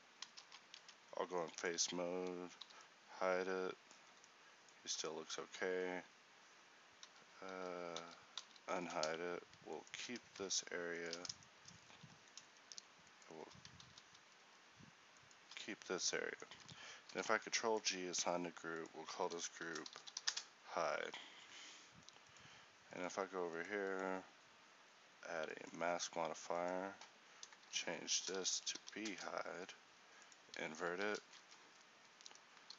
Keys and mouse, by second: 0.9 ctrl+t, 2.7 h, 4.1 a, 4.9 a, 7.1 z, 13.9 ctrl+z, 17.2 ctrl+g, 21.1 Tab, 30.9 a.